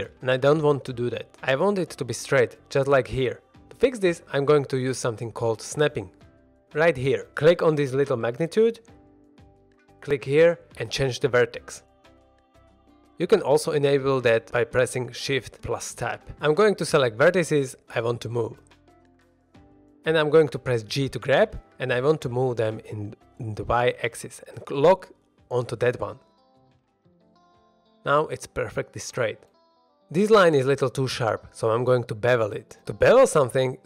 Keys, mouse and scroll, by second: 0.6-1.4 middle drag, 3.1-3.5 middle drag, 3.5 click, 8.4 click, 9.8 click, 13.1 shift+Tab, 15.1 shift+Tab, 15.4 shift+Tab, 15.6 alt+a, 15.6 shift+middle click, 15.6 click, 16.2 click, 16.8 shift+click, 17.6 shift+click, 18.3 shift+click, 19.2-19.5 middle drag, 19.7 shift+middle drag, 20.1 middle click, 20.7 g, 23.3 y, 26.9 click, 27.2-30.8 middle drag, 29.9 typing, 31.6 shift+middle drag, 32.0 scroll up 1, 32.3 middle drag, 32.8 shift+middle drag, 33.1 scroll down 1, 33.3 middle drag.